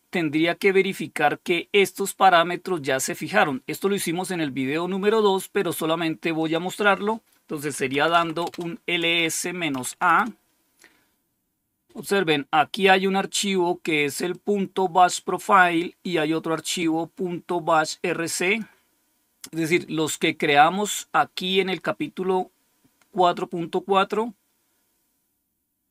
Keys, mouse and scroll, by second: 2.3-2.8 scroll down 1, 6.3 click, 7.6-10.0 typing, 14.2-15.8 drag, 16.7-18.0 drag, 18.3 click, 18.6 click, 19.6 scroll down 2, 20.5 scroll down 2, 21.2-21.6 scroll down 1, 22.8-24.4 scroll down 5, 24.7-25.4 scroll down 3.